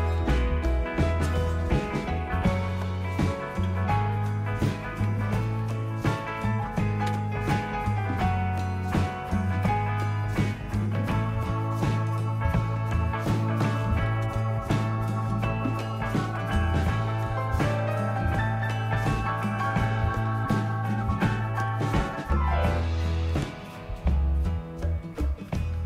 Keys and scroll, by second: 2.0 Up, 2.9-3.5 Left, 3.8 Left, 4.8-6.0 typing, 6.1 Delete, 6.4 Delete, 7.1 Return, 13.8 typing, 15.3 Return, 15.3-17.1 typing, 19.9-21.4 typing, 21.7 Return, 24.9-25.7 typing.